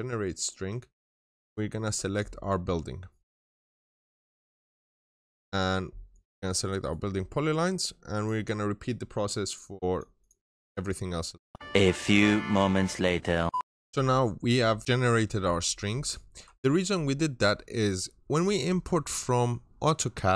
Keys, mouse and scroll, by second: 1.4-2.0 scroll up 1, 2.0 click, 3.9 right click, 4.6 click, 4.9 double click, 6.0 click, 6.5 right click, 8.0 click, 10.0 double click, 10.6 click, 13.6 click.